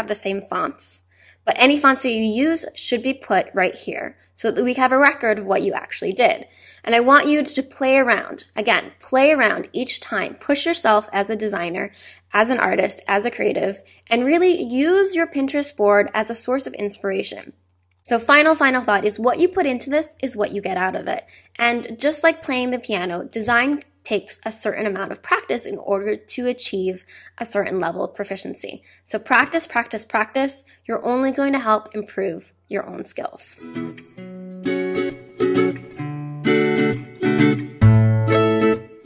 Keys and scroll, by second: 22.4 space.